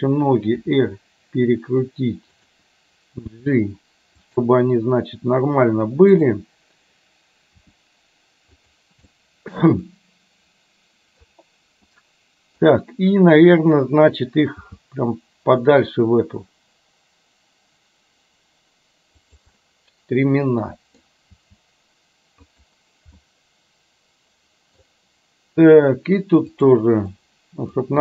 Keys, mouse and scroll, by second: 0.7 r, 3.4 g, 6.2 click, 7.6 r, 9.2-11.2 middle drag, 12.0-12.6 middle drag, 14.7 g, 19.6 scroll up 1, 19.7-21.0 middle drag, 21.5 g, 23.2 scroll up 1, 23.4-24.9 middle drag, 26.5 click, 27.1-27.7 middle drag.